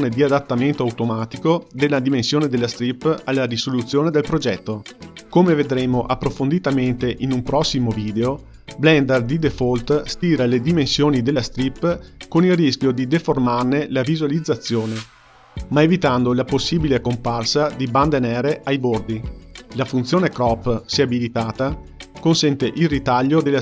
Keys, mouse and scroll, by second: 21.2-22.7 drag, 22.7-23.6 scroll down 4.